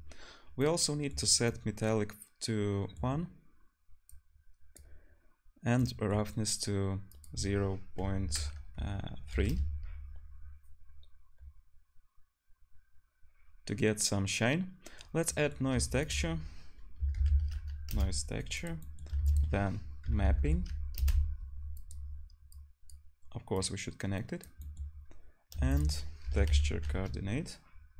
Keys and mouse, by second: 15.9 shift+a, 18.7-21.0 drag, 19.2 shift+a, 20.4 p, 25.6 shift+a.